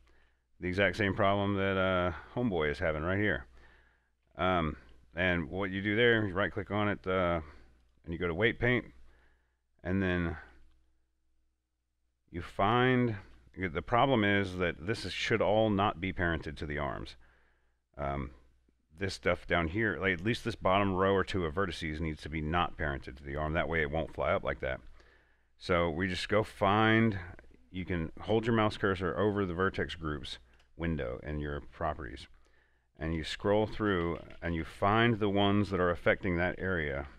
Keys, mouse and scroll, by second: 0.4 alt+Tab, 1.3 scroll up 1, 2.6 scroll down 1, 3.3 scroll up 1, 3.5 typing, 4.5 alt+Tab, 6.4 right click, 8.1 click, 10.3 middle click, 11.1 scroll up 1, 12.1 middle click, 13.2-17.0 shift+middle drag, 26.4 click, 32.5 click, 32.5 click, 33.3 Up, 34.0 Down, 35.3 Up, 36.1 Down.